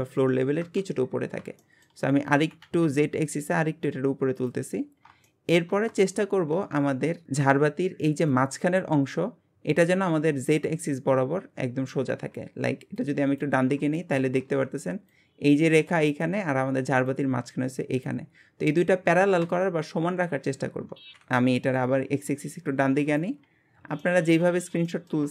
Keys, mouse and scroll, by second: 1.1-1.6 scroll up 2, 1.6 shift+middle click, 2.3 g, 4.7 scroll down 2, 5.2-12.2 shift+middle drag, 12.9 click, 13.6 scroll down 1, 14.0-19.7 shift+middle drag, 21.8 click, 23.4 scroll up 2, 24.0-24.5 shift+middle drag, 24.9-25.3 shift+middle drag.